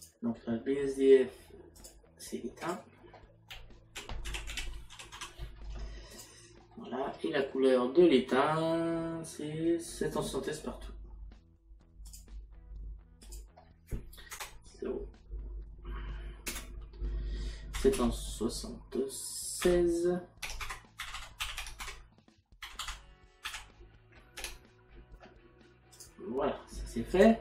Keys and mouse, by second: 1.8 click, 4.3 t, 6.2 click, 13.3 click, 14.3 KP_Decimal, 16.5 BackSpace, 17.8 KP_7, 19.7 KP_6, 20.5 Tab, 21.8 KP_Decimal, 24.4 Tab, 27.1 click.